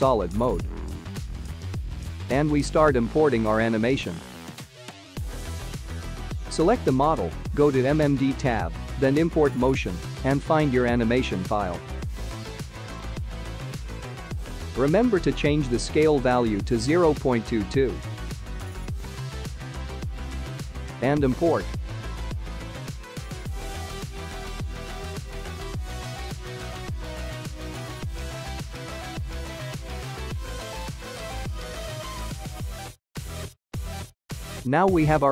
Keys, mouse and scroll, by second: 0.1 shift+middle click, 2.5 click, 4.6 click, 5.2 click, 6.4 click, 6.6 click, 7.3 click, 8.1 click.